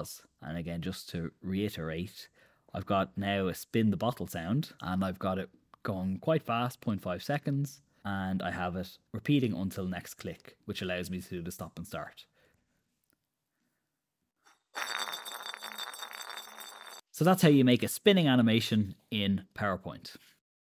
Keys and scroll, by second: 12.9 super+Return, 17.4 Escape.